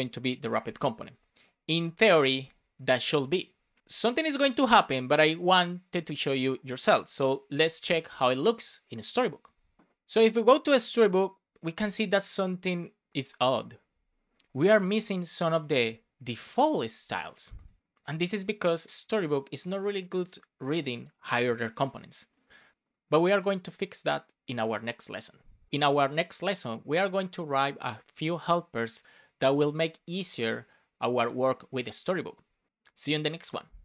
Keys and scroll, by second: 0.6 super+s.